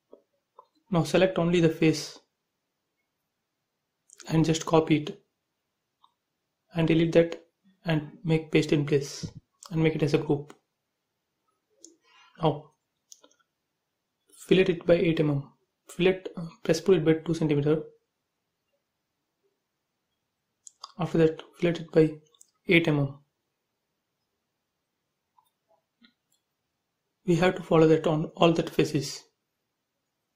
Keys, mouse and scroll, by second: 3.4 ctrl+c, 3.6 space, 3.9 click, 6.2 Delete, 7.2 click, 8.9 right click, 9.8 click, 10.4 click, 11.2 middle click, 12.0 shift+middle click, 13.2-15.4 typing, 13.4 click, 15.8 click, 16.3 click, 19.5 space, 20.2 scroll up 1, 20.4 middle click, 21.5 f, 21.9 click, 23.0-24.5 typing, 24.7 click, 26.3 f, 26.7 space, 27.2 click, 28.1 f, 28.1 click, 28.5 space, 29.3 click.